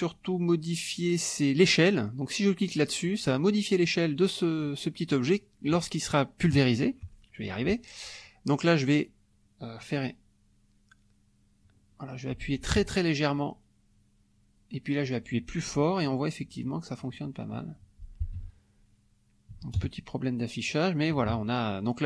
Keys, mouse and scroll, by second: 2.6 click, 3.4 middle click, 5.1-6.6 middle drag, 11.6 click, 12.7 ctrl+z, 13.3-17.8 ctrl+drag, 18.2 middle click, 18.3 F1, 18.8 middle click, 19.5 KP_Subtract, 19.8 KP_Add, 21.1 KP_Subtract.